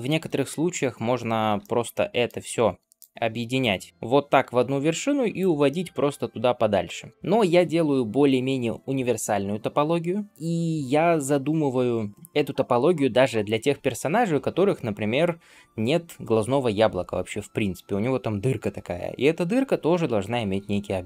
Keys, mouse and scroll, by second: 0.3 Tab, 1.5 shift+middle drag, 1.8-2.2 middle drag, 2.3 alt+z, 2.8-3.9 drag, 3.9 m, 5.5-7.1 middle drag, 7.1 ctrl+z.